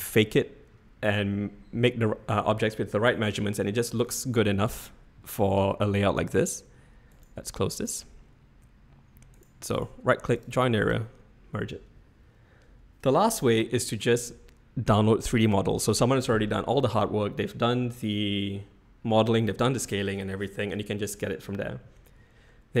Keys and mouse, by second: 5.8-6.2 middle drag, 7.1 right click, 7.7-9.5 right drag, 9.9-11.0 right drag.